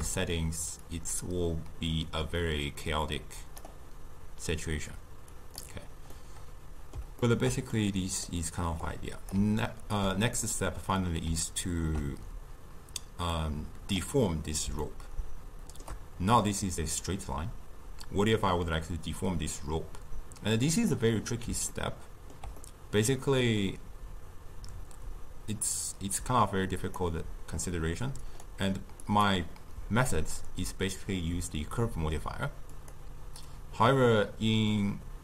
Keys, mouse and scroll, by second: 0.9-3.9 drag, 5.4 click, 6.1-8.9 middle drag, 8.9 click, 9.6-13.4 ctrl+middle drag, 13.4-14.8 drag, 14.8-18.0 shift+middle drag, 20.8 click, 21.7-25.7 ctrl+middle drag, 26.8 click, 28.2 click, 29.1-32.1 drag.